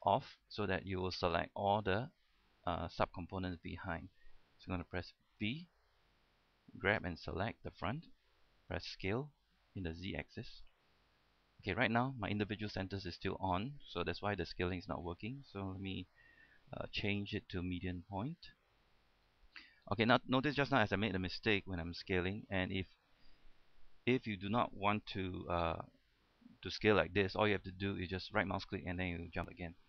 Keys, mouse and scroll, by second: 0.1 click, 5.6 b, 6.3-7.8 drag, 9.1-9.5 typing, 11.8-12.9 right drag, 17.3 click, 19.9-20.2 scroll up 1, 21.9 s, 23.9 scroll down 1, 24.1 a, 24.6 right click, 25.6 s.